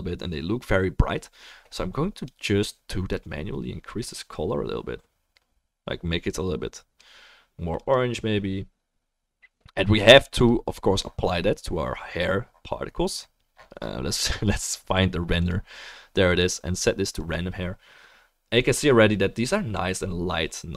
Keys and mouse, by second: 10.4 click, 15.4-20.7 drag, 16.6-18.0 middle drag.